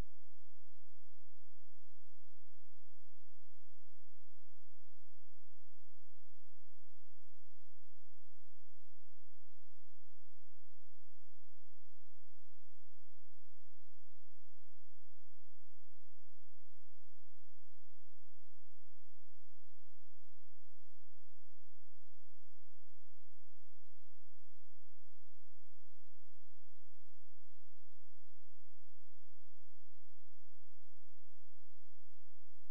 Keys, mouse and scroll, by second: 6.7-7.2 scroll down 1, 7.2-7.8 scroll up 1, 7.8 click, 10.0-10.3 scroll down 1, 10.3-11.0 scroll up 1, 11.0 click, 15.6 shift+Page_Down, 17.6 click, 19.3 scroll down 1, 19.6-21.2 scroll up 1, 26.7 right click, 27.5 click, 28.2-28.9 scroll down 1, 28.9-29.5 scroll up 1, 29.5 click, 30.6 scroll down 1, 30.8-31.5 scroll up 1, 31.5 click, 32.4-32.7 scroll down 1.